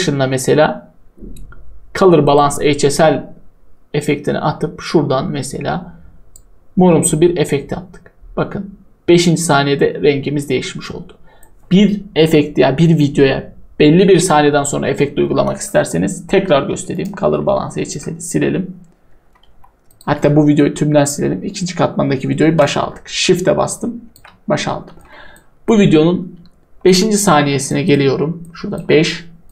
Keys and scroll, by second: 17.3 Delete, 19.4 Delete, 20.1 Delete.